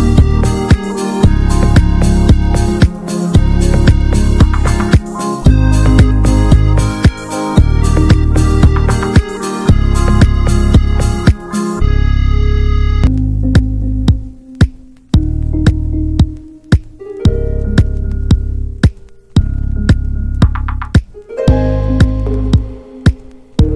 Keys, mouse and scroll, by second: 0.3-1.6 shift+middle drag, 1.6 click, 2.1 alt+shift+click, 3.6 click, 4.1-5.4 middle drag, 5.4-5.9 shift+scroll up 1, 5.9-6.8 scroll up 1, 6.8 click, 7.1 alt+shift+click, 8.7 ctrl+z, 9.0 shift+click, 10.0-10.9 drag, 10.9 Tab, 11.3-12.0 scroll down 9, 12.0 middle click, 12.3-12.7 scroll down 1, 12.7 middle click, 13.2-13.8 scroll up 1, 13.8-15.6 middle drag, 15.6 ctrl+s, 16.1 click, 17.2 middle click, 17.7-18.2 scroll up 2, 18.2-20.5 drag, 23.3-23.7 drag.